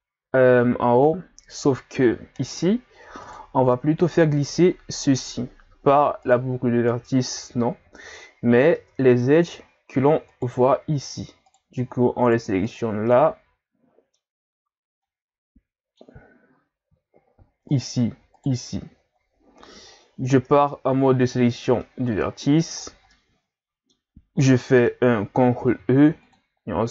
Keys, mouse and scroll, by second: 2.4 right click, 3.2 shift+right click, 5.0 right click, 6.2 alt+right click, 8.7 ctrl+Tab, 10.3 shift+right click, 11.5 right click, 12.2 shift+right click, 12.7 shift+right click, 13.1-16.5 middle drag, 16.5-17.4 scroll up 2, 17.7 shift+right click, 18.4 shift+right click, 20.5 ctrl+Tab, 21.8-22.8 middle drag, 22.8-23.1 scroll down 5, 23.1 middle click, 24.0-24.5 scroll up 4, 24.5-25.6 middle drag, 25.6 ctrl+e.